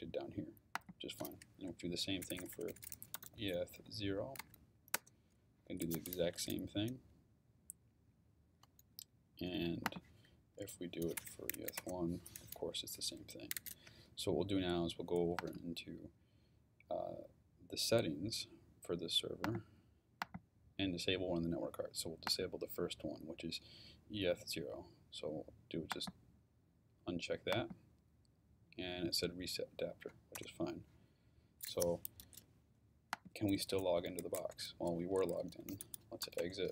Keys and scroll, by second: 1.6 Up, 2.2-4.4 typing, 4.9 Return, 10.4 Up, 11.2-11.5 typing, 11.8 Return, 30.4 Return, 33.9-36.7 typing.